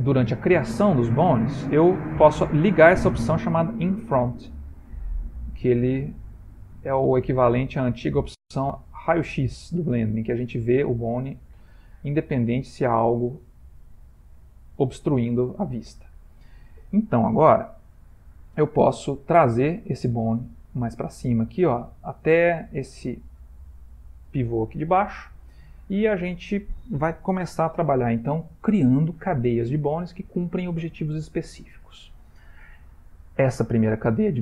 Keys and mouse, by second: 4.6 click, 5.6 middle click, 12.9 click, 14.0 ctrl+middle click, 14.6 shift+middle click, 14.8 shift+middle click, 15.4 ctrl+middle click, 17.3 ctrl+middle click, 18.3 click, 19.8 g, 25.8 shift+middle click.